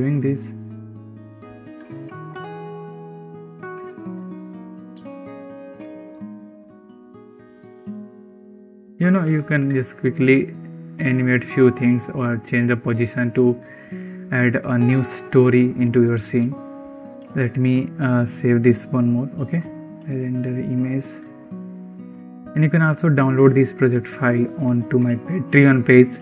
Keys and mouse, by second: 1.0 ctrl+z, 1.2 ctrl+z, 1.4-9.0 typing, 3.6 ctrl+z, 3.9 ctrl+z, 4.0 ctrl+z, 5.1 ctrl+z, 5.2 ctrl+z, 5.2 ctrl+z, 5.3 click, 5.6 shift+click, 7.3 shift+click, 17.1 ctrl+s, 19.3 drag, 20.0 ctrl+s, 20.0 click, 21.4 ctrl+s.